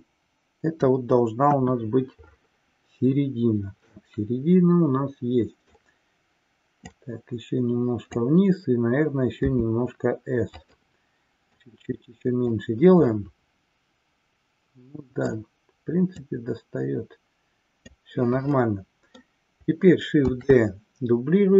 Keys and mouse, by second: 1.5 KP_1, 4.0-6.0 middle drag, 7.0 click, 10.8 click, 11.5-12.6 drag, 13.1-15.5 middle drag, 16.4 click, 18.6 middle click, 20.4 shift+d.